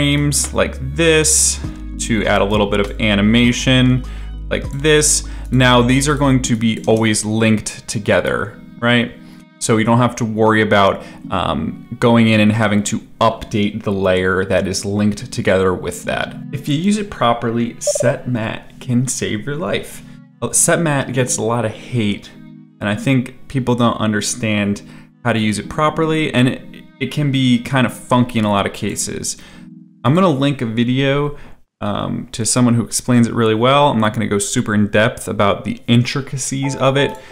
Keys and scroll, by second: 6.8 space.